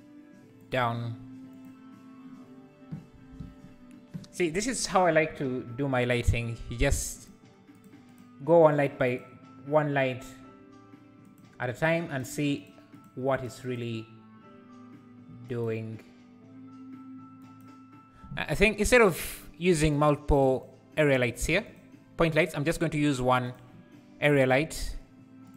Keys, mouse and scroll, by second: 1.5 Left, 7.1 click, 7.7 Left, 7.7 click, 8.1 Left, 8.1 click, 8.7 Left, 8.7 click, 9.1 Left, 9.1 click, 11.2 click, 11.7 click, 12.1 click, 12.6 click, 12.9 click, 13.3 click, 13.6 click, 15.5 click, 17.4 click, 20.0 click, 20.6 shift+click, 21.2 shift+click, 21.8 x, 22.3 click, 23.4 click, 24.3 r.